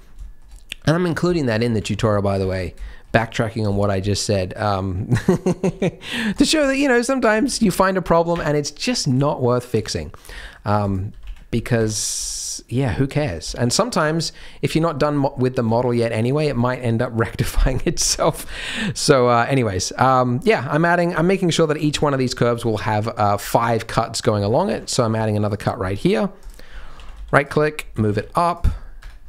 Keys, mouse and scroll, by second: 0.0 scroll up 3, 0.0 KP_3, 0.2 shift+middle click, 1.5 shift+middle click, 1.6 scroll up 2, 1.7 alt+a, 1.9 c, 2.6 scroll down 2, 2.8 shift+middle click, 3.1-3.6 scroll up 1, 3.6-4.0 scroll up 1, 4.0 shift+middle click, 5.8 ctrl+r, 6.9 scroll up 1, 7.3 alt+a, 7.5 c, 9.2 shift+middle click, 9.8-10.2 scroll up 2, 10.2 g, 11.0 g, 12.1 g, 12.9-13.4 scroll down 4, 13.1 Tab, 13.4 z, 14.3-14.8 scroll down 2, 14.8 shift+middle click, 15.1-15.6 scroll up 2, 15.6 Tab, 17.9 z, 18.4-21.0 shift+scroll up 2, 18.5 shift+middle click, 21.5 click, 21.9 shift+click, 22.3 shift+click, 22.8 shift+click, 24.6 ctrl+r, 26.7 scroll up 4, 26.9 alt+a, 27.1 c, 27.9 g, 28.7-29.2 scroll down 9, 29.0 Tab.